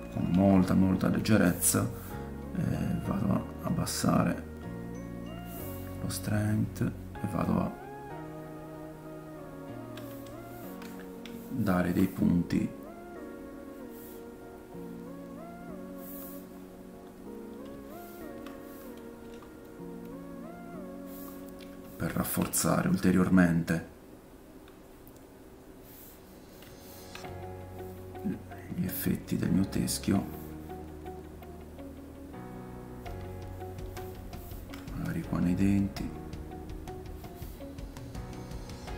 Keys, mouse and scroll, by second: 0.3 f, 1.3-2.8 middle drag, 2.8-19.7 drag, 10.4 ctrl+middle click, 11.5 shift+middle click, 16.5 middle click, 17.1 middle click, 17.9 shift+middle click, 19.2 f, 19.7 middle click, 20.1-38.9 drag, 21.4 middle click, 22.0 shift+middle click, 22.5 middle click, 26.2 middle click, 26.8 shift+middle click, 27.4 middle click, 33.6 ctrl+middle click, 34.3 shift+middle click.